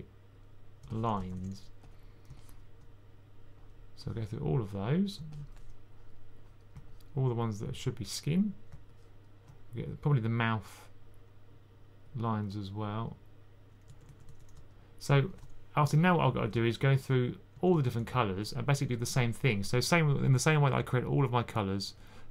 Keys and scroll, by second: 0.8-1.5 typing, 13.8-14.1 typing, 17.2-17.9 typing.